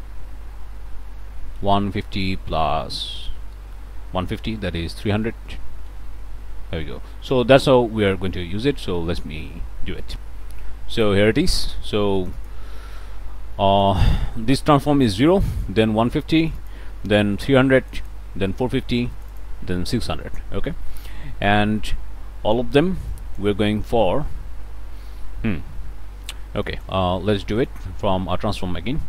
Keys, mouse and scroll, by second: 1.3-3.2 typing, 4.8 3, 5.1 0, 5.9 Return, 10.1 click, 11.0-14.2 drag, 15.3 click, 16.4-18.3 drag, 19.1 click, 20.0 click, 20.4 scroll up 1, 20.8 click, 21.4-22.7 drag, 23.1 click, 25.0 scroll up 1, 25.2-25.6 scroll down 1, 25.6 scroll up 1, 26.6 click, 27.2 click, 27.6 click, 28.1 t, 28.6 ctrl+click.